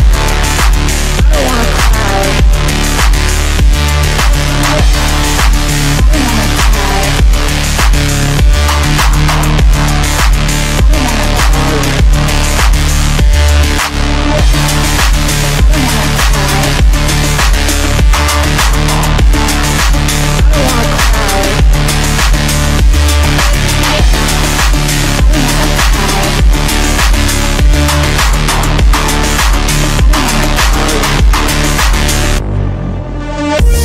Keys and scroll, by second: 29.4 shift+Page_Down, 30.3 w.